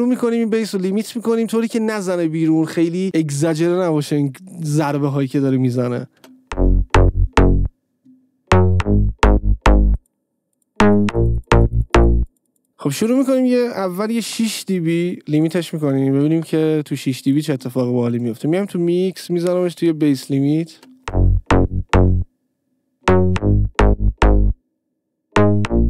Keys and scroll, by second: 6.5 space, 12.7 space, 14.6 Return, 16.7 Return, 21.1 space.